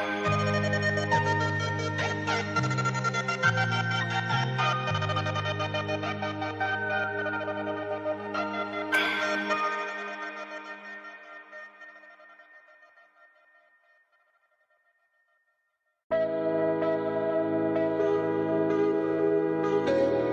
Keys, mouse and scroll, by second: 9.8-11.5 shift+drag, 11.5-13.0 drag, 13.7-14.2 alt+scroll up 1, 14.3 space, 14.4 click, 14.6 space, 14.7 space, 15.4 click, 16.6 Down, 17.0 Left, 17.3 Down, 17.8 Left.